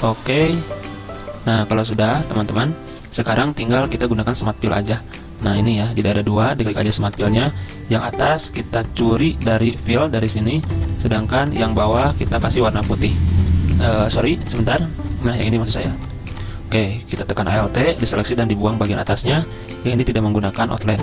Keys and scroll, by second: 18.2 Delete.